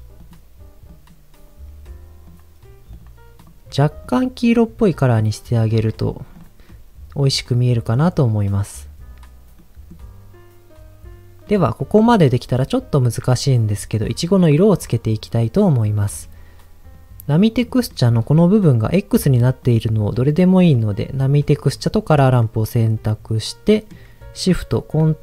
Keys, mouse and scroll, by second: 2.2 click, 2.9 click, 3.3 click, 6.3 click, 6.6-7.9 middle drag, 8.5-9.6 scroll up 1, 9.6 middle click, 11.4 middle click, 16.1-16.9 scroll down 2, 16.9 middle click, 17.6 click, 17.6 middle click, 18.1 scroll up 2, 19.1 click, 20.6 middle click, 21.0 click, 21.6-22.0 scroll down 3, 22.4-23.4 middle drag, 23.5 middle click.